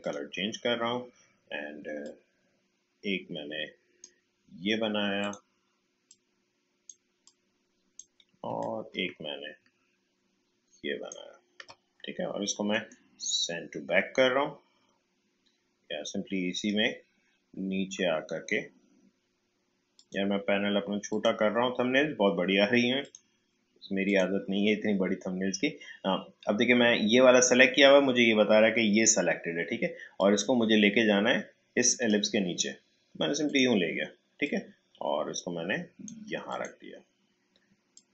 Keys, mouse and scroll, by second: 0.0-8.6 drag, 8.6-12.7 alt+drag, 12.7 right click, 16.5 click, 18.3-19.9 scroll down 1, 19.9 click, 30.1-38.1 drag.